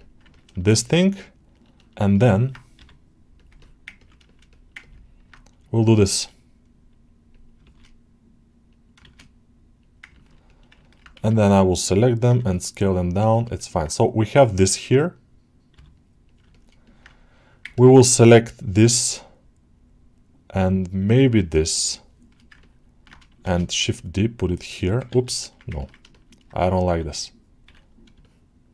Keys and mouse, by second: 0.1 ctrl+middle click, 0.4-2.4 alt+shift+middle drag, 3.2 click, 3.4 middle click, 3.8 ctrl+alt+middle click, 4.1 alt+shift+middle click, 4.4 alt+middle click, 4.6 ctrl+middle click, 7.2 click, 7.6 shift+d, 9.0 shift+d, 9.7 click, 10.0 ctrl+alt+middle click, 10.3 middle click, 10.7 ctrl+alt+middle click, 13.2 alt+shift+middle click, 13.4 alt+middle click, 16.1 click, 16.4 middle click, 16.7 middle click, 17.6 ctrl+alt+middle click, 18.2 click, 21.4 shift+click, 22.5 ctrl+alt+middle click, 25.6 ctrl+alt+middle click, 26.0 alt+shift+middle click, 28.1 shift+click.